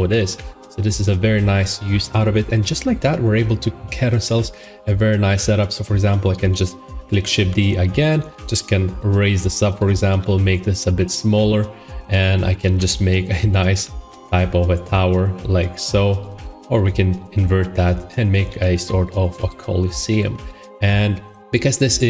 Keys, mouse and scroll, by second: 0.2 shift+middle click, 0.6 scroll, 0.9 middle click, 7.3 d, 8.0 g, 9.7 click, 10.1 s, 12.0 click, 12.5-13.6 typing, 14.0 Escape, 14.7 s, 16.3 click, 16.4-17.1 typing, 18.2 click, 18.4 s, 19.4 click, 20.1 middle click, 20.6 shift+middle click.